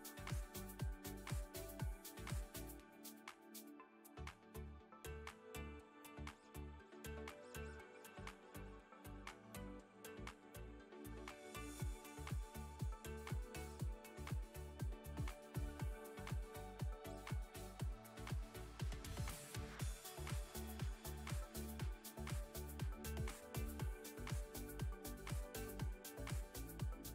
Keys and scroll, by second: 14.1 Tab, 20.5 f, 21.0 Tab, 23.9 Tab.